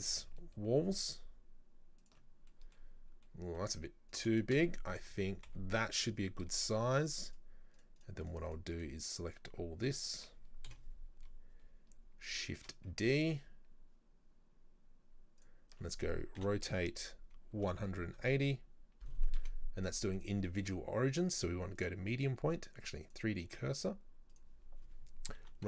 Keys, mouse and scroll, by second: 2.3-3.3 scroll down 2, 2.5 middle drag, 3.3-4.2 middle drag, 4.2 right click, 4.4 shift+right click, 5.5 Delete, 7.1 shift+right click, 7.3 shift+right click, 7.8 shift+right click, 8.0 shift+right click, 8.3 shift+right click, 8.5 shift+right click, 8.8 shift+right click, 9.1 shift+right click, 9.3 shift+right click, 9.9 shift+right click, 10.7 KP_7, 12.6 shift+d, 16.4 r, 19.4 ctrl+z, 20.2-25.4 drag, 25.4 r.